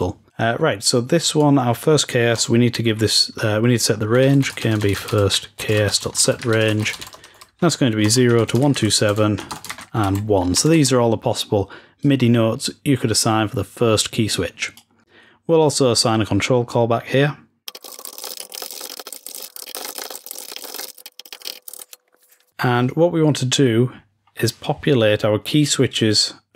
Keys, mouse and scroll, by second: 1.2-3.8 drag, 11.9-15.6 drag, 17.6 click, 20.1 scroll down 1, 23.9-25.3 scroll up 1.